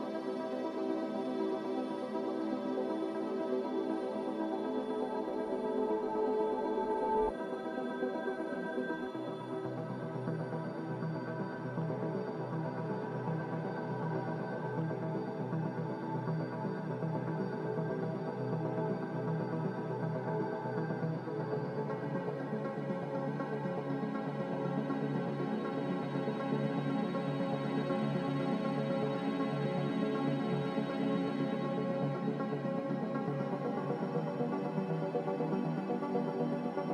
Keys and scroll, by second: 0.0 q, 6.8 s, 11.7 z, 22.0 a, 23.4 z, 26.0-27.0 typing.